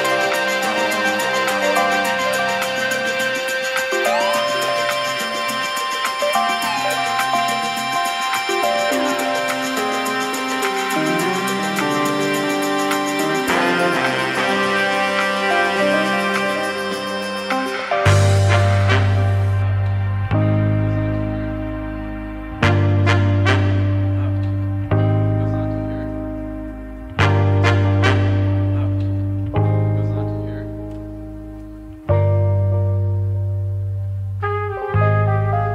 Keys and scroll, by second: 1.6 s, 10.7 KP_1, 13.2 KP_Decimal, 13.2 KP_7, 13.2 KP_5, 13.4 Return, 24.7 ctrl+z, 30.7 ctrl+[, 34.1 ctrl+[.